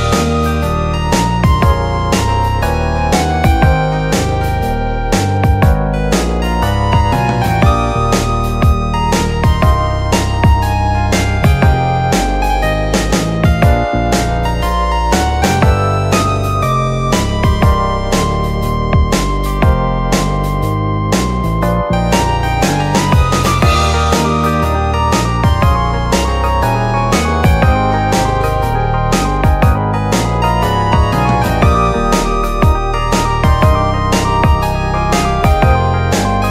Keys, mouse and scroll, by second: 0.5 click, 1.3 click, 2.2 click, 3.0 shift+click, 6.3 j, 6.9 click, 7.4-8.6 middle drag, 8.6 KP_Decimal, 8.8 middle click, 8.8-10.3 scroll down 31, 10.3 scroll up 1, 10.6 middle click, 11.4 click, 12.9-13.4 scroll down 4, 13.4-15.7 shift+middle drag, 15.7 click, 16.6 ctrl+r, 18.5 ctrl+r, 20.5 ctrl+z, 21.5 alt+shift+click, 22.3 ctrl+b, 23.6 click, 24.1 shift+click, 25.1 e, 25.9 click, 27.8-28.9 middle drag, 28.9 s, 30.8 middle click, 31.3 r, 33.5 e, 34.4 click, 35.5 s.